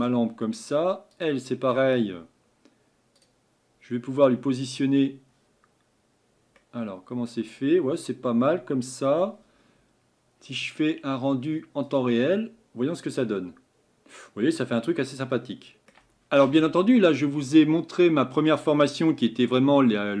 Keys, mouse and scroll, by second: 1.2 click, 6.6-12.0 middle drag, 12.0 click, 15.2-20.2 middle drag.